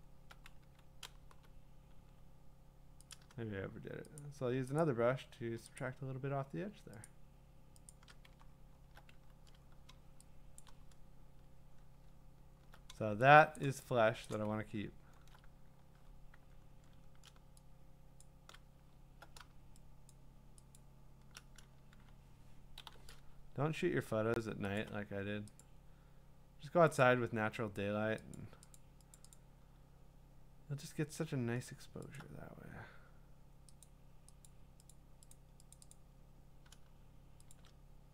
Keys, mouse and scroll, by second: 0.6-2.0 typing, 3.1 click, 4.2 shift+click, 4.8 shift+click, 7.1 alt+click, 7.9 alt+click, 10.5 2, 12.4 scroll, 12.4 q, 13.5 middle click, 13.6 click, 14.4 click, 14.6-16.1 scroll, 16.3 w, 16.4 click, 16.4 middle click, 18.2 shift+click, 20.1 shift+click, 20.8 shift+click, 24.8 alt+click, 25.6 click, 27.0 click, 28.3 click, 28.8 click, 29.1 click, 29.3 click, 32.2 alt+click, 33.5 alt+click, 33.8 click, 34.5 click, 34.9 click, 35.7 click, 35.9 click, 37.5 shift+click.